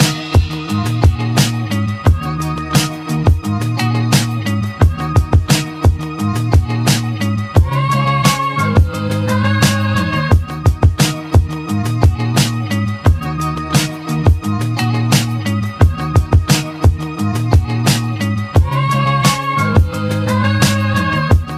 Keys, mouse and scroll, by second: 3.5 click, 4.4 click, 6.0 0, 8.1-14.6 drag, 13.9 0, 14.6 0, 15.9 click, 16.9-21.5 drag.